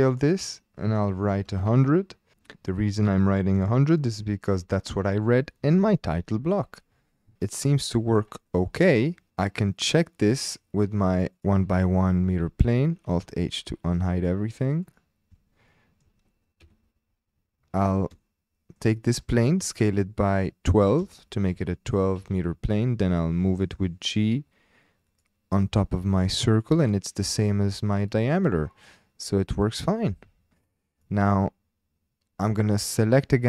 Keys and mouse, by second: 1.2 KP_1, 1.5 KP_0, 1.7 KP_0, 2.3 KP_Enter, 2.4-3.0 shift+drag, 3.7-4.6 shift+drag, 7.4 click, 8.5 click, 12.5 alt+h, 14.8 click, 15.7-16.0 shift+drag, 16.6 KP_Decimal, 18.2-18.8 shift+drag, 19.6 s, 20.7 KP_1, 20.8 KP_2, 21.0 KP_Enter, 21.7-22.3 shift+drag, 23.0 g, 25.1-26.7 drag, 30.0 ctrl+z, 30.3 ctrl+z.